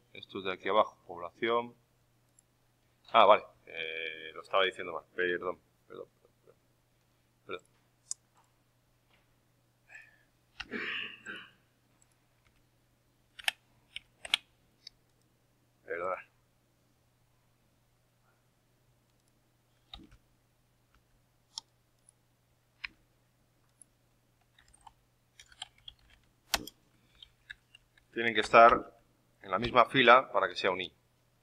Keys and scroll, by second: 13.3 ctrl+v, 13.3 Escape, 20.0 Right, 28.6 ctrl+x, 28.6 Up, 28.7 Right, 29.5 ctrl+v.